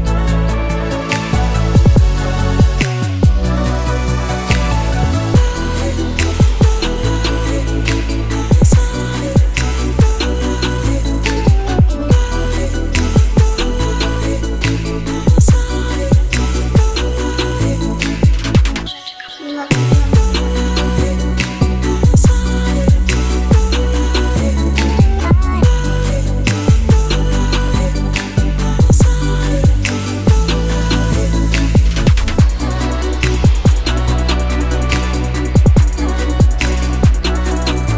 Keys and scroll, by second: 13.2 BackSpace, 13.4 3, 13.7 Return, 17.0 BackSpace, 17.3 3, 17.6 Return, 21.4-22.9 typing, 26.1-27.6 typing, 28.3 Return, 30.9-32.4 typing, 33.0 Return, 36.3-37.8 typing.